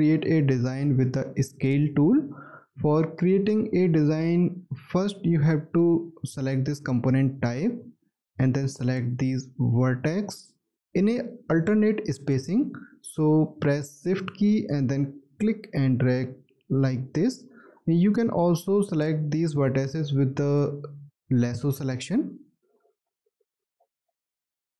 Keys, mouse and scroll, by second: 14.3 shift+click, 21.7 shift+click, 22.9 shift+click, 24.2 shift+click.